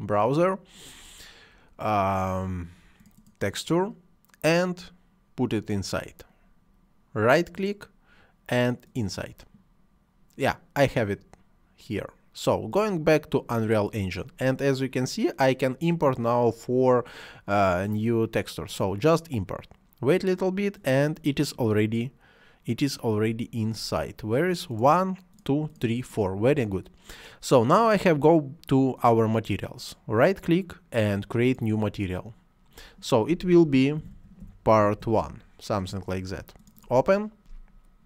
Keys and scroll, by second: 34.0-35.0 typing.